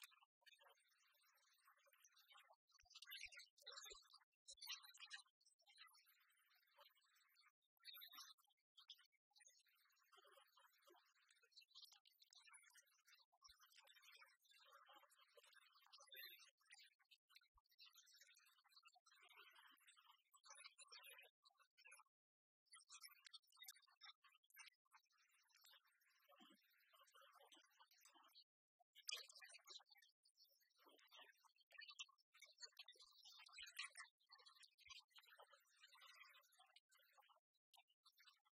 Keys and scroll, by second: 3.1 ctrl+t, 33.5 Return.